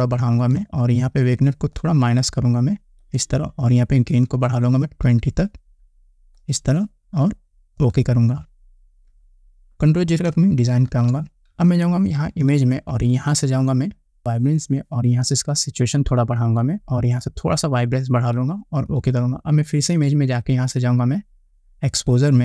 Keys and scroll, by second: 10.8 ctrl+0.